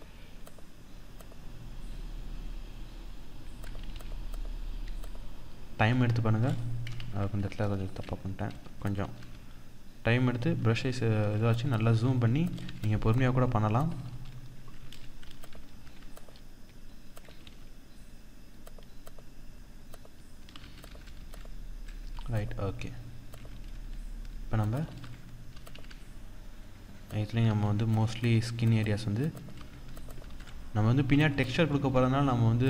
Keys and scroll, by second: 6.5 ctrl+z, 11.1 ctrl+=, 13.3 ctrl+=, 14.8 ctrl+-, 18.4 ctrl+-, 20.2 ctrl+-, 21.7 ctrl+-, 24.4 ctrl+=, 29.8 ctrl+=, 31.9 ctrl+-, 32.4 ctrl+=.